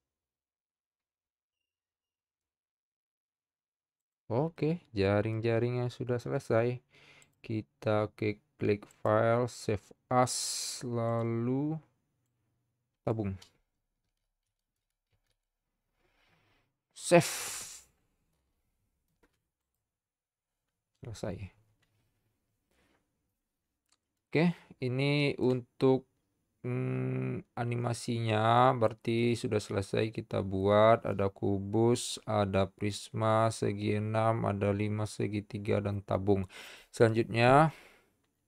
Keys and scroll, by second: 14.1-15.2 typing.